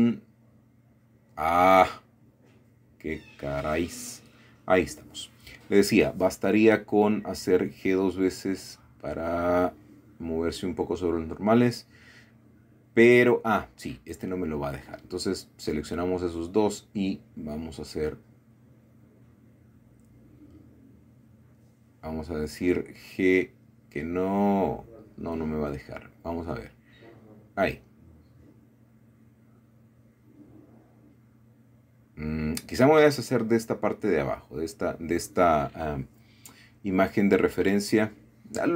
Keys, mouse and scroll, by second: 2.2-2.9 scroll up 1, 2.9-4.7 scroll down 2, 4.1-6.0 middle drag, 6.3 g, 6.4 g, 9.8 shift+click, 10.8 shift+click, 11.8 g, 12.0 g, 13.3 Escape, 14.4 g, 15.0 Escape, 16.5-17.7 shift+middle drag, 20.2 scroll up 2, 21.1-22.5 shift+middle drag, 23.0 typing, 23.8 Escape, 25.3 click, 26.6 g, 29.7 Escape, 30.4-31.4 middle drag, 31.4-32.1 scroll down 1, 32.1 scroll up 1, 32.2 scroll down 1, 32.5 middle click, 33.4 middle click, 33.7 Tab, 34.1-35.2 drag, 35.3 x, 36.1 click, 37.5 ctrl+KP_7, 38.6-38.7 scroll up 4.